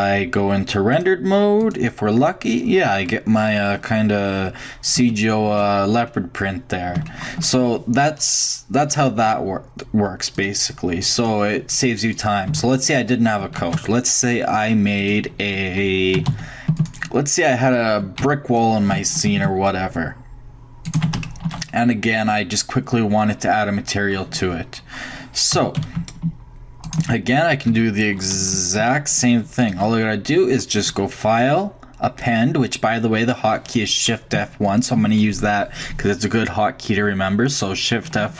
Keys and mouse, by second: 0.6-1.7 drag, 2.6 click, 2.7-5.0 middle drag, 9.0-9.7 shift+middle drag, 10.4-13.4 drag, 12.2 right click, 12.5 x, 13.6 shift+a, 16.1 s, 16.6 s, 17.2-20.3 middle drag, 18.2 g, 21.3-24.4 drag, 25.5 g, 27.7 g, 30.8-32.6 drag, 32.7 middle click, 34.6-36.4 drag, 36.4-37.7 middle drag.